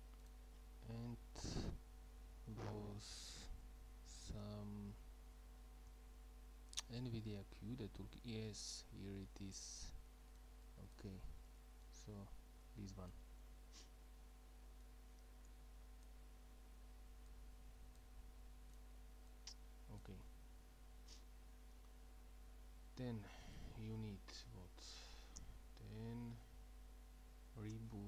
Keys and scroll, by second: 1.1 Up, 1.2 Up, 1.4 Up, 1.5 Up, 1.7 Up, 1.8 Up, 1.9 Up, 2.1 Up, 2.2 Up, 2.3 Up, 2.5 Up, 2.6 Up, 2.8 Up, 2.9 Up, 3.0 Up, 3.1 Up, 3.3 Up, 3.4-7.3 typing.